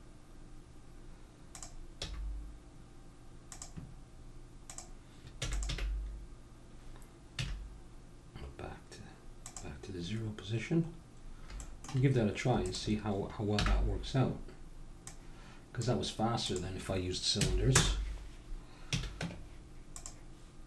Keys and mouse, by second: 1.5-3.5 drag, 2.0 g, 4.7-7.3 drag, 5.4 e, 5.7 g, 10.3-11.6 middle drag, 12.6-18.9 drag, 13.5 n, 18.9 a, 19.2 Tab.